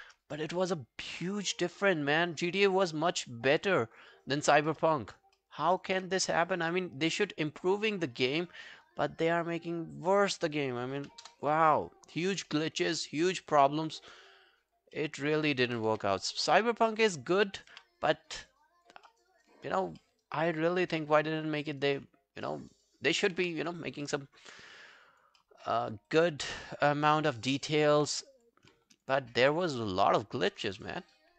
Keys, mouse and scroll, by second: 0.4 alt+middle click, 0.6 alt+right click, 4.0 alt+click, 4.7 alt+middle click, 5.1 alt+right click, 5.4 alt+middle click, 5.7 alt+right click, 11.3 Return, 11.3 2, 12.5 alt+middle click, 12.9 alt+scroll down 1, 13.2 alt+click, 14.1 alt+click, 14.2 alt+click, 15.0 alt+middle click, 15.2 alt+right click, 15.5 alt+click, 15.9 w, 16.4 right click, 17.7 q, 18.3 scroll down 2, 18.5 alt+click, 19.1 alt+middle click, 19.2 alt+scroll down 1, 19.3 alt+right click, 19.6 alt+click, 20.0 alt+middle click, 20.3 alt+right click, 20.5 alt+click, 20.9 q, 21.0 right click, 22.5 alt+middle click, 22.7 alt+right click, 23.4 q, 24.1 alt+middle click, 24.4 alt+scroll down 1, 24.7 alt+click, 25.4 alt+middle click, 25.7 alt+right click, 25.9 alt+click, 27.3 alt+middle click, 27.5 alt+right click, 27.8 alt+click, 28.9 alt+click, 29.5 alt+click, 29.5 right click.